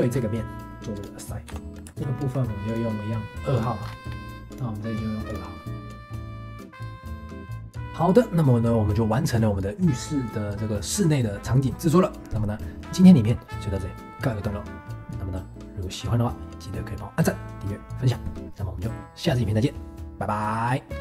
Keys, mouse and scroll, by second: 0.9 click, 1.6 Tab, 2.0 scroll down 1, 2.1 shift+middle click, 2.6-3.8 drag, 3.8 scroll up 3, 4.3 scroll down 1, 4.5 click, 5.3 click, 6.0 click, 6.1 ctrl+s, 6.3 click, 7.3 ctrl+s, 7.4 scroll down 5, 7.4 shift+middle click, 7.5 click, 7.7-12.2 drag.